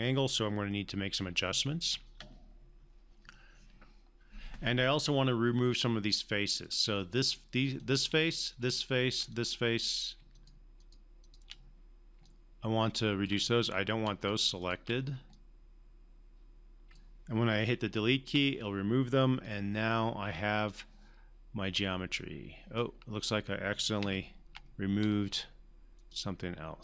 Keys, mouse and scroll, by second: 0.7-1.6 alt+middle drag, 4.4 alt+middle click, 4.6-6.8 drag, 6.7-9.0 drag, 9.3 click, 10.3-12.1 shift+drag, 12.2-13.5 alt+click, 15.3-17.2 alt+drag, 18.2 Delete, 19.4-20.6 alt+drag, 24.0 ctrl+z, 26.0 shift+click.